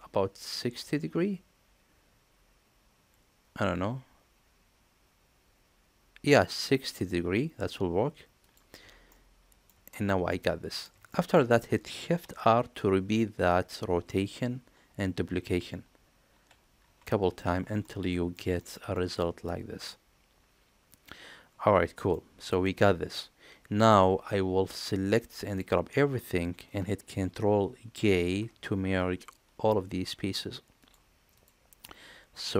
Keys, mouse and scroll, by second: 9.1-9.7 middle drag, 9.9 shift+middle click, 10.3-10.9 middle drag, 11.1 shift+middle drag, 15.6 shift+r, 16.3 shift+r, 16.8 shift+r, 17.3 shift+r, 17.8 middle click, 18.6 shift+middle drag, 18.9-19.2 middle drag, 19.9-21.1 middle drag, 21.3 middle click, 22.6-23.8 middle drag, 25.2-25.6 drag, 28.1 ctrl+j, 30.8 click, 31.4 click, 31.8-32.5 middle drag.